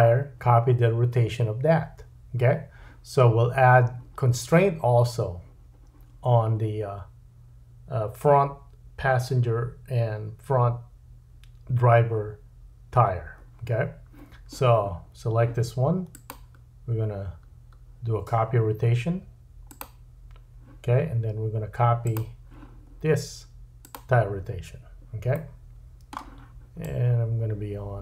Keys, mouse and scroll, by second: 22.1-26.8 middle drag, 26.8-28.0 drag.